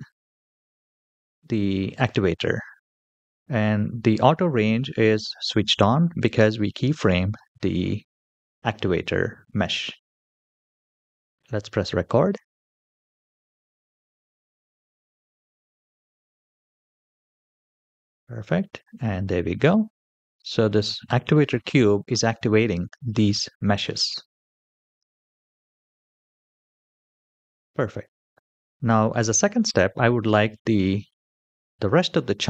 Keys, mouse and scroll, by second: 10.9-16.5 drag, 16.5 typing, 17.6 space, 23.0-23.8 middle drag, 26.2 space, 26.6-27.0 scroll up 3, 27.2 click, 28.0-28.8 scroll down 1, 28.8 scroll down 1, 29.1-29.5 shift+middle drag, 29.7 middle click.